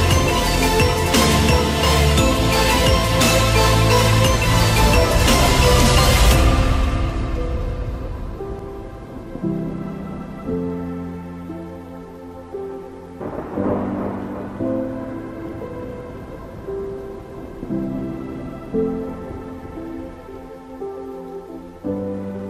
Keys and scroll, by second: 16.7 ctrl+t.